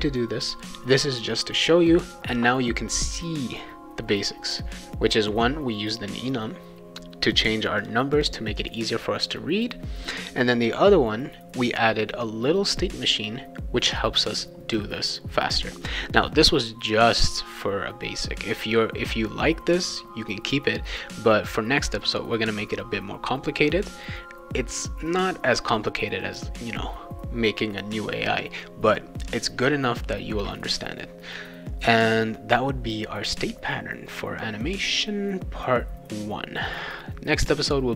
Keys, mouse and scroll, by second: 7.2 click, 7.8 click, 8.2 click, 8.6 click, 21.9 click.